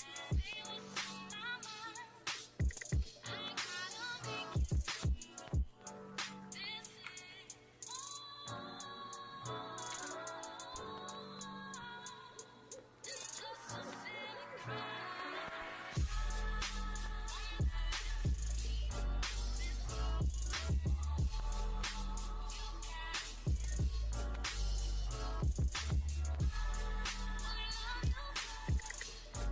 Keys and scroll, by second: 0.6 x, 1.7 x, 3.0 ctrl+z, 7.2 x, 9.9 x, 13.7 x, 14.7 x, 17.8 [.